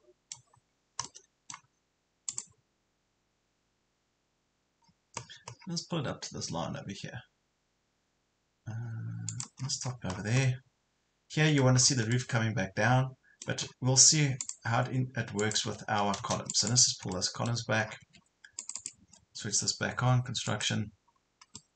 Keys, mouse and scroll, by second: 0.7 scroll up 1, 1.1 middle click, 2.3 click, 4.9 scroll up 1, 5.7 scroll up 1, 9.3 click, 9.7 scroll down 1, 10.5-11.8 middle drag, 12.1-13.5 middle drag, 13.7 scroll up 1, 14.5 click, 15.7 Escape, 15.9 scroll down 1, 16.5 click, 17.1 middle click, 17.9 scroll down 1, 18.0 Escape, 18.6 click, 21.1 scroll up 1, 21.5 middle click.